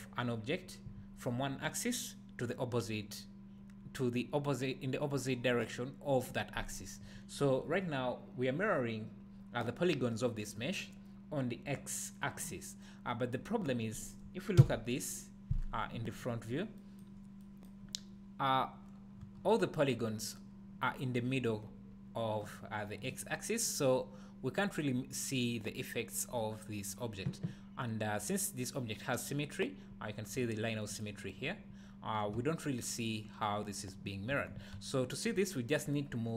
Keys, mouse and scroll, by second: 7.1-10.5 scroll up 1, 14.6 KP_1, 16.5 scroll up 1, 16.8-17.4 drag, 17.1 scroll down 1, 17.7-31.0 drag, 19.2 Tab, 32.3 Tab, 34.7 a.